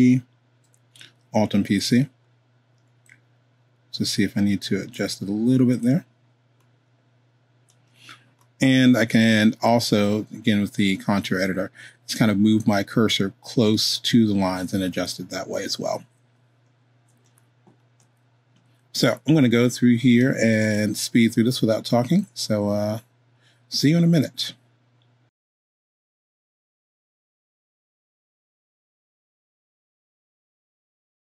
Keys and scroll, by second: 15.9 super+z, 25.4 super+z, 27.3 2.